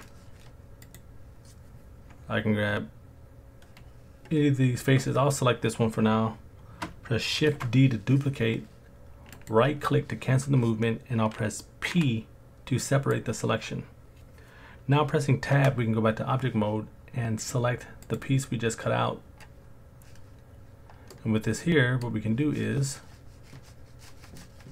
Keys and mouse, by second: 0.8 click, 7.5 shift+d, 11.9 p, 15.6 Tab, 17.4 click, 18.0 click, 21.1 middle click.